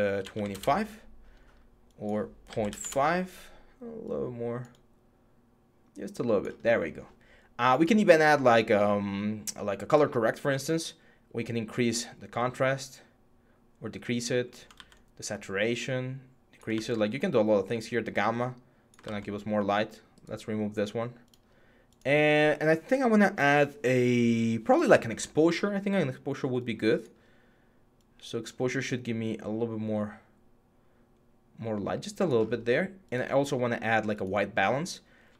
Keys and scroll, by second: 0.0-0.6 typing, 2.0-2.7 typing, 14.5 ctrl+z, 16.5 ctrl+z, 18.8 ctrl+z.